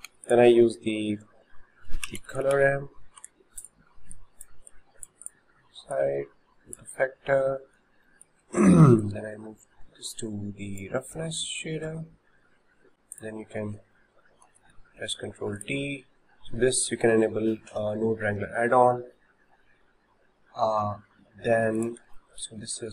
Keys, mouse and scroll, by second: 0.4 shift+a, 4.2 click, 4.7 click, 6.8 click, 8.1-9.0 shift+middle drag, 9.0-10.8 drag, 11.4-12.9 shift+middle drag, 12.9 Delete, 13.2 click, 14.7 ctrl+t, 15.6 drag, 21.8 click, 22.2 shift+middle click.